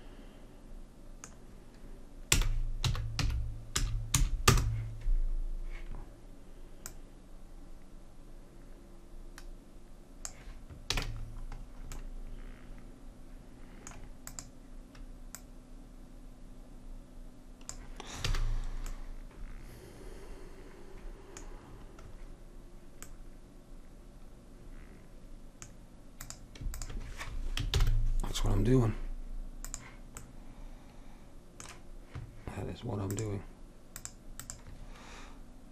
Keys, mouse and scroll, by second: 2.4 r, 7.0-8.9 drag, 11.1 a, 14.4-17.3 drag, 18.4 a, 26.4-27.9 drag, 27.9 ctrl+j, 30.4-32.7 drag, 33.2-35.7 drag.